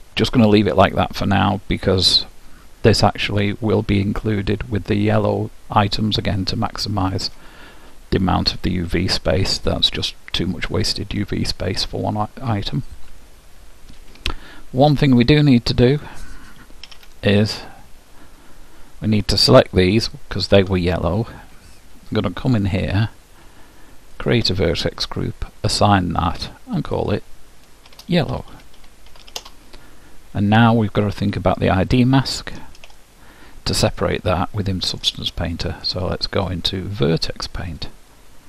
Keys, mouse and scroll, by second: 16.9 a, 20.1-21.9 drag, 22.6-28.9 drag, 28.9 l, 31.0-33.0 middle drag, 34.0-35.7 middle drag, 37.8 click.